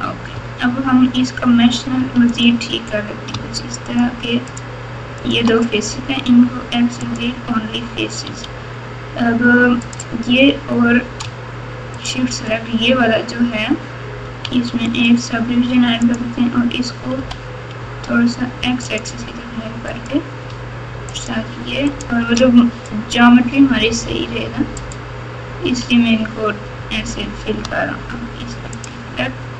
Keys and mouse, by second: 0.3 1, 1.9 3, 3.9 click, 4.5 shift+click, 5.2 shift+click, 6.2 x, 8.2 1, 9.9-11.0 drag, 11.9 shift+click, 14.4 q, 16.0 click, 17.1 g, 19.9 click, 21.1 shift+click, 21.8 shift+click, 23.8 g, 25.6 f.